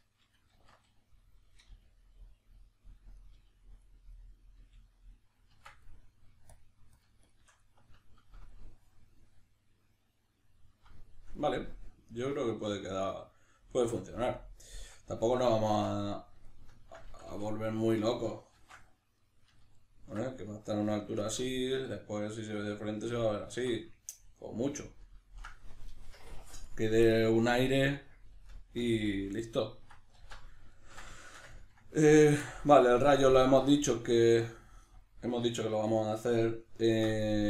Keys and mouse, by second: 0.0 right click, 0.6 alt+q, 2.6 click, 3.2 right click, 3.4 g, 4.2 right click, 4.6 g, 5.1 click, 5.5 Tab, 5.9 middle click, 6.5 shift+click, 7.9-32.2 ctrl+middle drag, 15.7 b, 17.1 a, 18.5 shift+c, 30.2 alt+q, 32.2 right click, 32.4-37.4 shift+middle drag.